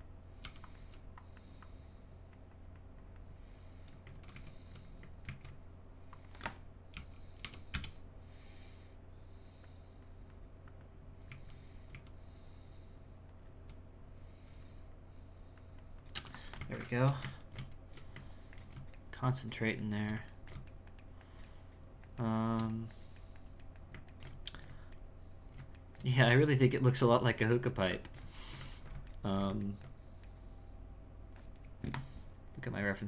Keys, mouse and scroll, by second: 0.4 g, 0.6 click, 1.6-4.1 drag, 4.1 ctrl+z, 4.3 ctrl+z, 6.1-11.3 drag, 11.3 z, 11.9 z, 15.0-16.1 drag, 16.8-33.0 shift+middle drag.